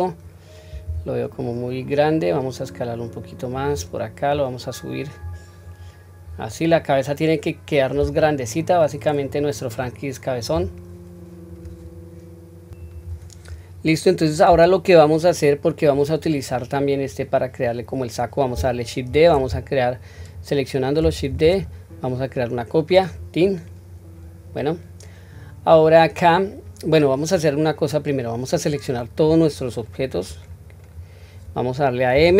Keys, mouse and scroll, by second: 0.9 s, 4.3 click, 5.6 scroll down 1, 6.2-6.7 scroll down 2, 6.7-8.3 middle drag, 10.5 KP_1, 20.1 click, 21.2 shift+d, 27.3 scroll down 1, 29.1-30.8 drag, 29.1-30.5 scroll down 1, 32.0 m.